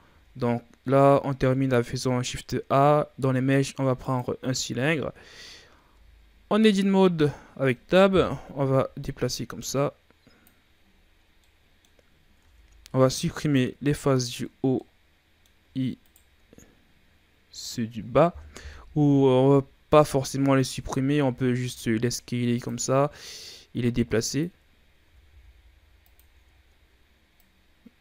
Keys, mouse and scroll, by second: 0.0 shift+a, 4.8 scroll down 2, 5.2 shift+scroll up 3, 5.7 Tab, 6.7-8.0 drag, 8.0 KP_3, 9.5-10.7 drag, 10.7-11.1 scroll up 4, 11.1 scroll down 2, 11.3 middle click, 12.3 ctrl+Tab, 14.1 right click, 14.6-16.0 middle drag, 16.0 shift+right click, 18.6 KP_1, 19.7-20.1 shift+scroll down 3, 20.1-20.7 scroll up 1, 20.7 a, 21.0 a, 21.4 s, 23.2-24.9 drag, 24.9 s, 26.4-27.3 shift+scroll up 4, 27.3 click.